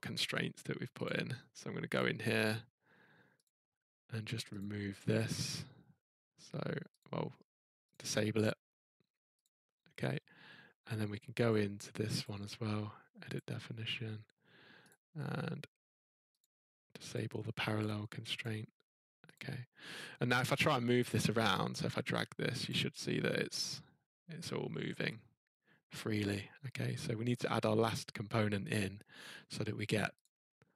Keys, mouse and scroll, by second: 1.0 click, 2.0 click, 3.4 click, 4.6 click, 7.0 click, 7.9 click, 9.4 click, 12.2 click, 13.3 click, 14.9 click, 16.4 click, 17.1 click, 18.4 click, 19.3 click, 21.4 click, 21.9 scroll, 22.7 click, 27.8 scroll, 30.2 click.